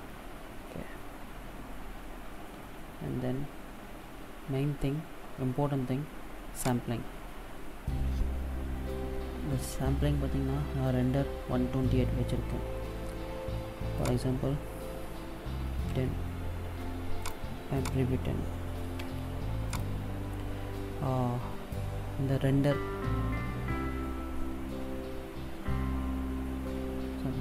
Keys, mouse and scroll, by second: 0.6-2.0 scroll down 4, 3.6-3.9 scroll down 2, 6.4 click, 13.7 click, 17.5 click, 24.6-25.7 scroll down 7, 25.9-27.4 scroll up 14.